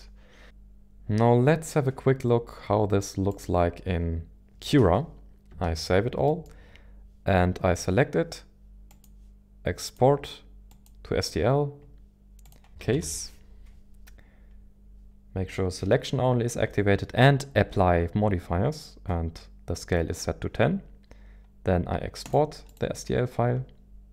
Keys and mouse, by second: 3.3 click, 5.7 ctrl+s, 6.2 middle click, 8.9-11.0 drag.